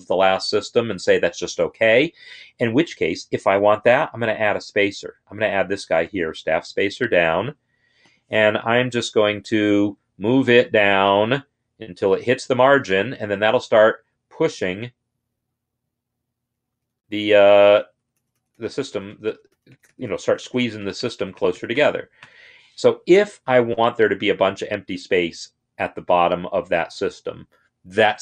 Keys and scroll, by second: 9.2 ctrl+Down, 9.7 ctrl+Down, 9.8-11.9 ctrl+Down, 12.0-16.3 ctrl+Down, 16.9 ctrl+Down, 17.2 ctrl+Down, 17.5 ctrl+Down, 17.6 ctrl+Down, 17.8 ctrl+Down, 18.2 ctrl+Down, 18.4 ctrl+Down, 18.7 ctrl+Down, 18.9 ctrl+Down, 19.3 ctrl+Down, 19.5 ctrl+Down, 19.7 ctrl+Down, 20.1 ctrl+Down, 20.2 ctrl+Down, 20.6 ctrl+Down, 20.8 ctrl+Down, 21.2 ctrl+Down, 21.4 ctrl+Down, 21.6 ctrl+Down, 22.0 ctrl+Down, 23.3 Escape.